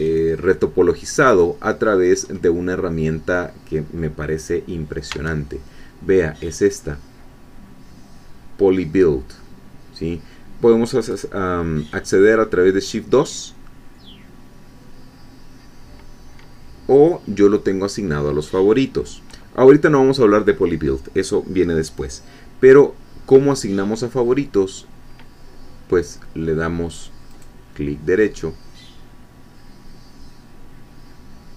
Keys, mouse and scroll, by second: 2.2-2.5 scroll up 2, 2.8 scroll down 2, 5.1 Tab, 27.3 right click.